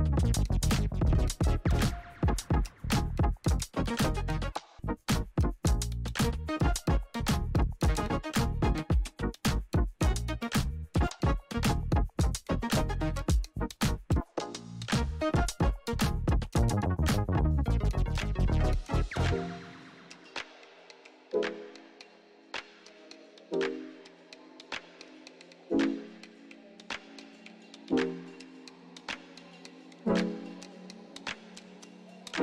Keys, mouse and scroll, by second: 2.5-23.4 drag, 30.1 click, 31.9 p.